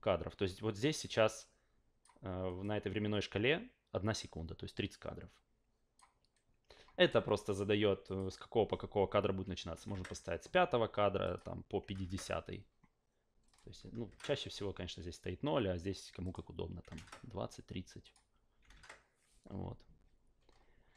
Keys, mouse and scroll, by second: 1.4 click, 2.6-5.9 drag, 7.0 click, 8.0 click, 11.2 click, 13.4 click, 16.2 click, 18.0 click.